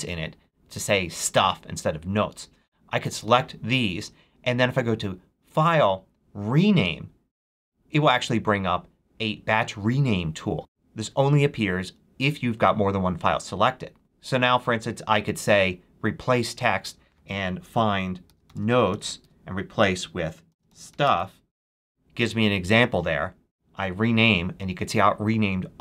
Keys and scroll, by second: 17.9-21.4 typing.